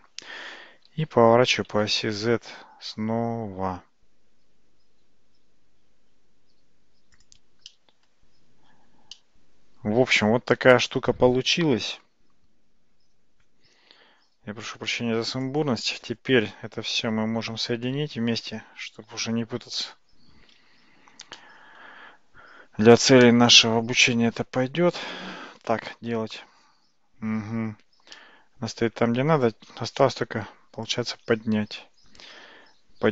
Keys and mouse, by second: 0.9 r, 7.7-8.1 middle drag, 9.2-14.3 middle drag, 14.9-15.5 drag, 17.4 ctrl+j, 21.4-21.9 shift+middle drag, 28.2-28.9 middle drag, 30.1 `, 32.3 g.